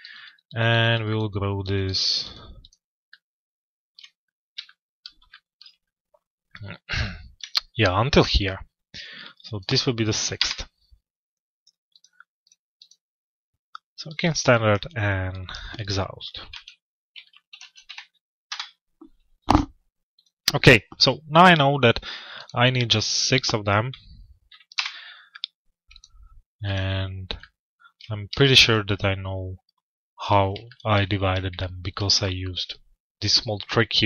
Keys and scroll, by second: 9.9 Return, 18.1 Return, 24.3 Return.